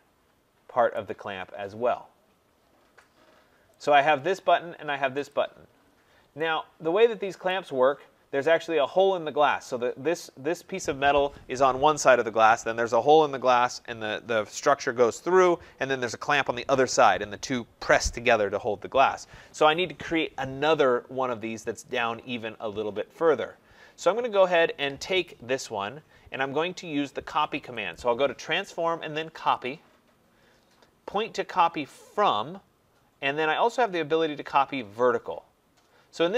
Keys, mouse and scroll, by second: 0.9 right click, 1.1 middle click, 1.1 middle click, 1.2 middle click, 2.8 scroll down 1, 2.9 scroll, 3.8 click, 5.3 click, 5.8-6.6 scroll, 7.4 right click, 7.7-8.3 scroll, 8.3 middle click, 8.5-9.7 scroll, 27.9 click, 29.5 click.